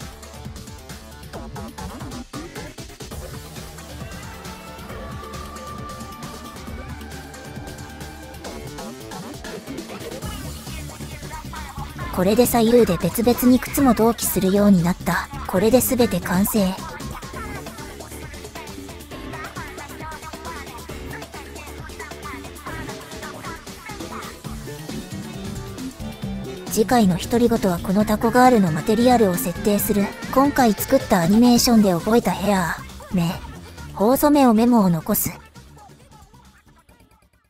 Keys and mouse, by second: 1.4 Tab, 2.5 click, 4.3-6.3 drag, 6.9 ctrl+z, 7.1 middle click, 7.9 middle click, 8.7 middle click, 10.0 click, 11.2 click, 12.1 click, 12.3-13.3 drag, 14.1 ctrl+z, 14.9 middle click, 16.1 shift+middle click, 16.9-17.9 middle drag, 18.3 KP_1, 21.9 shift+click, 24.1 middle click, 25.1-26.3 drag, 29.2-31.1 middle drag, 31.9 click, 32.0 ctrl+z, 32.1 ctrl+z, 32.6 click, 34.0 click, 34.8 KP_1, 35.8 shift+middle click.